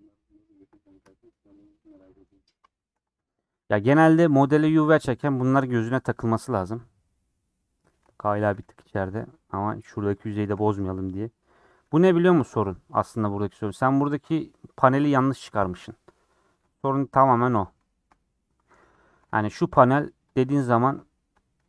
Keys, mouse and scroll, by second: 0.8 scroll down 3, 1.1-3.3 shift+middle drag, 3.3 click, 3.4 g, 5.0 g, 6.0 scroll down 4, 6.4 alt+z, 6.5 middle click, 7.4 scroll up 3, 7.8 shift+middle click, 8.1 scroll up 2, 8.5 g, 10.1 scroll down 2, 10.3 shift+middle click, 10.7 scroll down 2, 10.9 middle click, 11.4 scroll up 2, 11.8-14.1 scroll down 2, 14.1 middle click, 14.7-15.5 scroll down 6, 15.5 middle click, 16.1 scroll up 4, 16.4-18.6 middle drag, 18.6 scroll down 5, 19.0 shift+middle click, 19.2 Tab, 19.7 shift+a, 20.5 g.